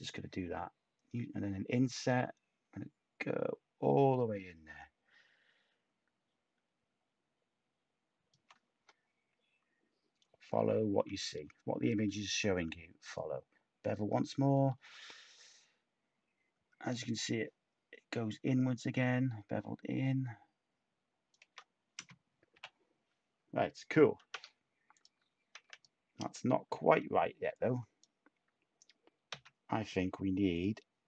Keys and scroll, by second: 11.9 b, 12.0 b, 22.5 /, 24.3 Tab, 25.5 Tab, 29.3 x.